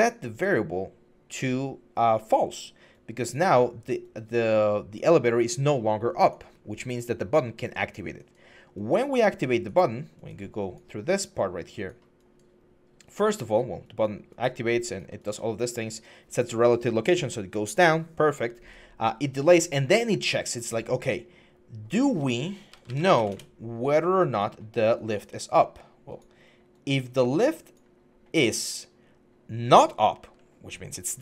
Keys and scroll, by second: 22.5-22.9 typing, 23.1 Return.